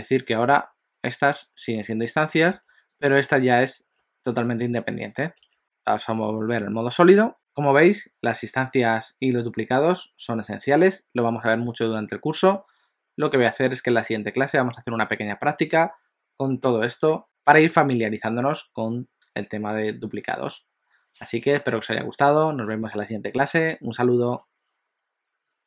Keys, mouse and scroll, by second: 0.6 Tab, 1.3 s, 2.6 Tab, 3.1 click, 3.8 Tab, 4.3 s, 5.4 Tab, 5.6 click.